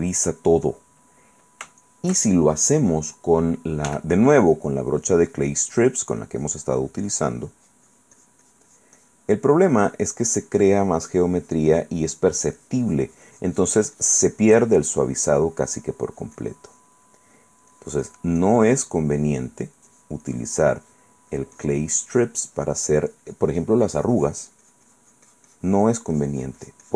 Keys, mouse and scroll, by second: 1.2 right click, 1.8-3.0 shift+right drag, 3.1 shift+middle click, 4.1 f, 4.6 click, 5.2-6.5 drag, 7.8-9.5 drag, 9.6 middle click, 10.0-11.2 drag, 11.3 click, 12.3 middle click, 17.4 middle click, 17.9-21.0 drag, 21.1 click, 21.5-26.3 drag.